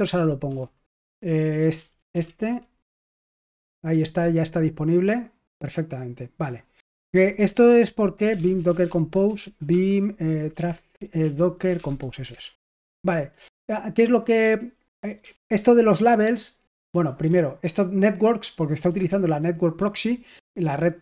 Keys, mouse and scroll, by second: 1.7 Down, 1.9 Down, 2.0 Down, 2.8 Up, 3.3 Return, 6.4 click, 6.9 ctrl+c, 8.0-15.4 typing, 12.2 Return, 16.8 k, 18.8 typing.